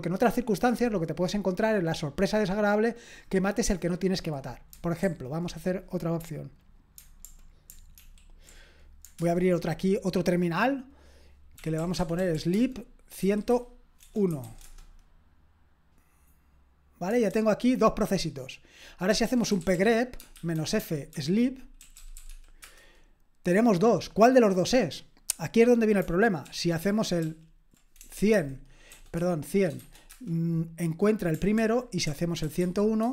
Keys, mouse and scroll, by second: 5.0 super+j, 8.0 ctrl+super+l, 9.2 super+Return, 11.5-14.9 typing, 17.3 super+k, 19.0-22.8 typing, 26.4 ctrl+p, 26.8 ctrl+p, 27.2 ctrl+p, 28.0-29.8 typing, 30.1 Return, 31.6 ctrl+p, 32.1-33.1 typing.